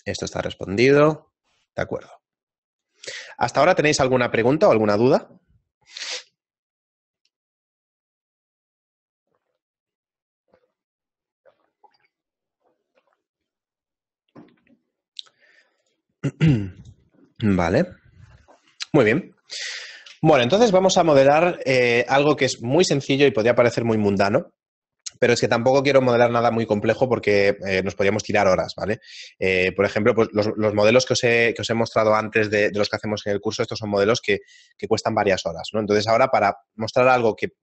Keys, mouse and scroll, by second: 20.0 middle click.